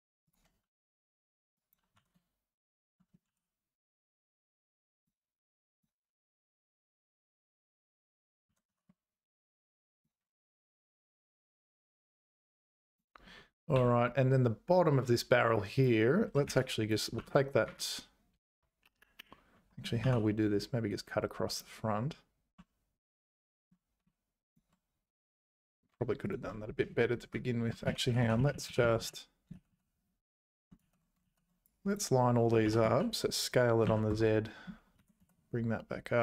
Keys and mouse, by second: 1.5 click, 1.9 g, 5.6 click, 7.6 click, 8.5 g, 12.9 click, 13.7 2, 15.6 click, 16.5 1, 16.6 click, 17.2 g, 20.0 k, 27.9 ctrl+z, 28.1 ctrl+z, 28.2 ctrl+z, 28.4 ctrl+z, 28.5 ctrl+z, 28.7 ctrl+z, 28.8 ctrl+z, 29.0 ctrl+z, 29.6 ctrl+shift+z, 29.7 ctrl+shift+z, 29.9 ctrl+shift+z, 30.0 ctrl+shift+z, 30.2 ctrl+shift+z, 30.3 ctrl+shift+z, 31.3 ctrl+z, 31.7 click, 32.7 s, 35.0 g.